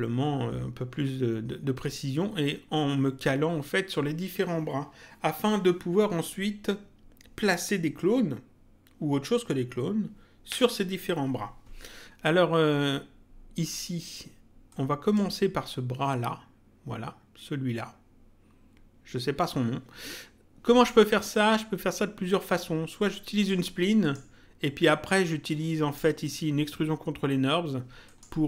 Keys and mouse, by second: 14.7 click, 23.0 click, 25.4 click, 28.0 click.